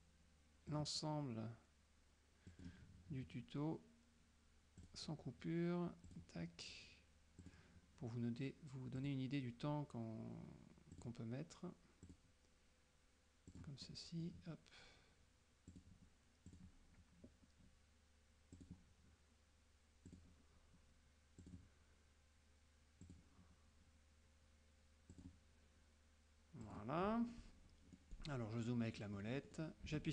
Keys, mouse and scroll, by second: 0.8 click, 2.6 click, 4.9 click, 6.2 click, 7.5 click, 9.1 click, 11.0 click, 12.1 click, 13.6 click, 13.9 middle click, 13.9-14.5 scroll up 1, 15.8 click, 16.6 click, 18.7 click, 20.2 click, 21.5 click, 23.1 click, 25.2 click, 26.7 click, 27.1 middle click, 28.1 middle click, 29.1 middle click, 29.9 F2.